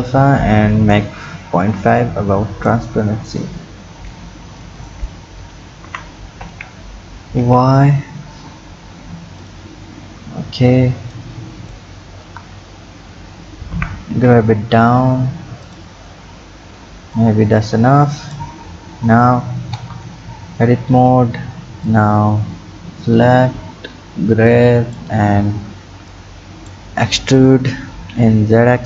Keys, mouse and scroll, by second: 3.0-4.8 scroll up 1, 4.8 click, 5.8 g, 9.8-11.1 scroll down 6, 11.1 click, 12.1-13.7 scroll up 10, 13.7 g, 16.0-17.2 scroll down 4, 17.2-18.7 drag, 18.7-19.8 scroll down 7, 19.8 Tab, 20.9-21.9 scroll up 5, 21.9-24.9 drag, 26.1 click, 27.0-28.0 scroll up 5, 28.0 e.